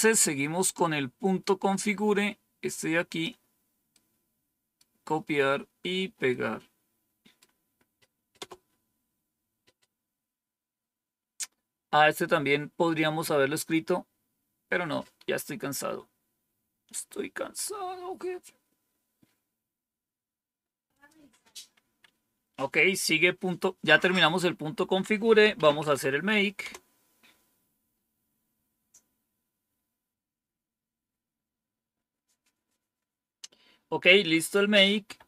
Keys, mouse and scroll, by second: 1.7-3.2 drag, 3.8 right click, 6.2-7.4 right drag, 8.3 Return, 17.0-17.7 scroll down 2, 20.9 click, 21.7 Up, 23.8 Down, 25.1-26.3 typing, 26.5 Return, 35.0 Up.